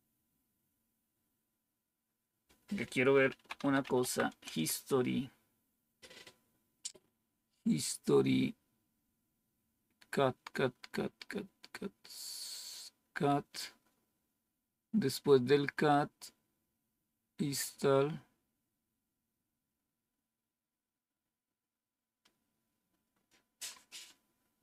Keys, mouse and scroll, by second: 2.9-4.2 typing, 4.3 Return, 22.1-23.2 scroll down 1.